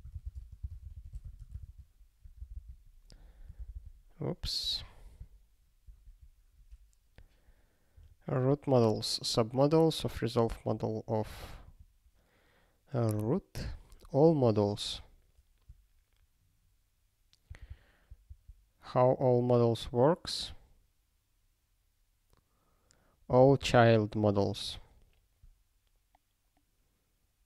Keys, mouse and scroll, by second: 0.0-1.7 typing, 2.4 super+b, 3.6 super+b, 3.7 super+b, 5.8 ctrl+g, 9.1-9.6 scroll down 1, 11.7 click, 11.7 click, 14.3 click, 14.4 click, 17.5 ctrl+n, 17.7-27.4 ctrl+n.